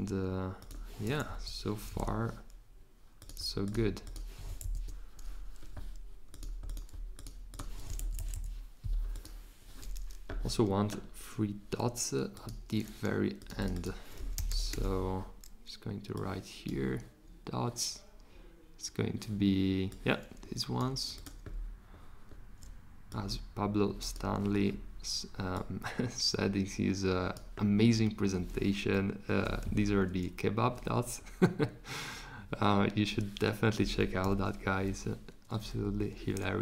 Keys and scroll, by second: 13.9-15.2 typing, 34.2 shift+g, 35.8 z.